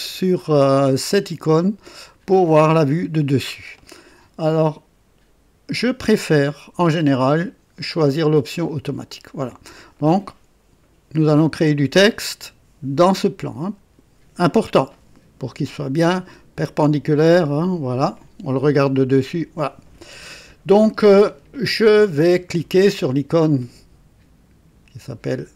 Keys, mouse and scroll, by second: 2.0 click, 7.1 click, 8.6 click.